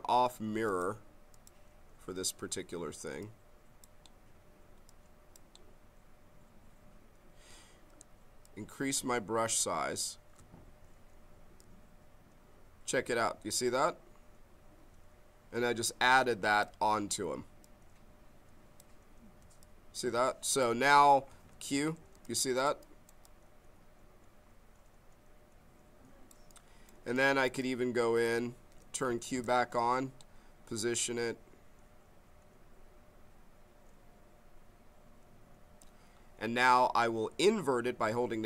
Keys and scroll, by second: 8.0 b, 21.5 q, 29.1 q.